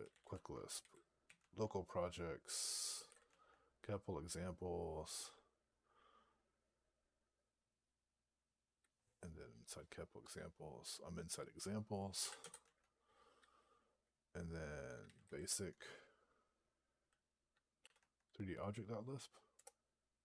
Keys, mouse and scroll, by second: 0.0-1.1 typing, 1.3 Tab, 2.6-3.4 typing, 11.8-12.8 typing, 14.7-15.6 typing, 17.7 3, 17.8 Tab, 19.7 Return.